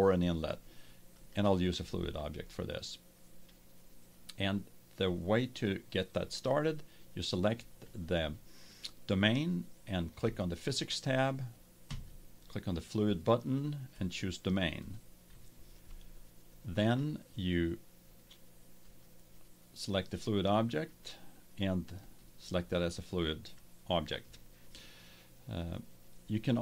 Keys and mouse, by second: 1.1-3.0 drag, 5.6-7.5 drag, 10.2-13.7 drag, 13.9-15.8 drag, 16.7-18.5 right drag, 18.5 click, 18.8-20.5 right drag, 20.5 click, 20.8 right click, 20.9-22.5 drag, 22.5 right click.